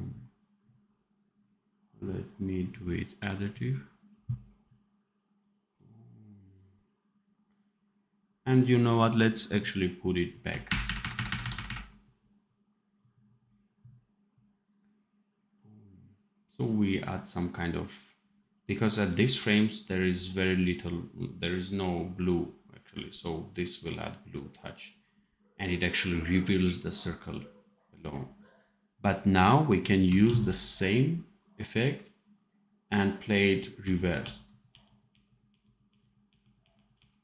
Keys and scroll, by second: 10.6 shift+KP_Subtract, 11.1 shift+KP_Subtract, 30.2 ctrl+s, 33.7 r, 35.0 r, 35.8 r, 36.5 r.